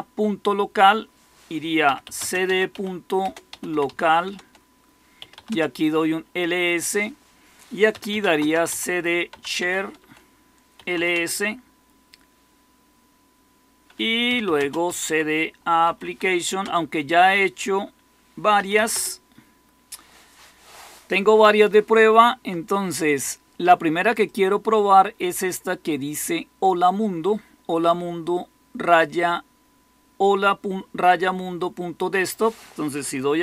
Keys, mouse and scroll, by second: 1.5-5.6 typing, 4.3 Return, 7.6-11.4 typing, 13.9-15.8 typing, 16.0 Tab, 16.5 Return, 18.2-19.3 typing, 33.2-33.4 typing.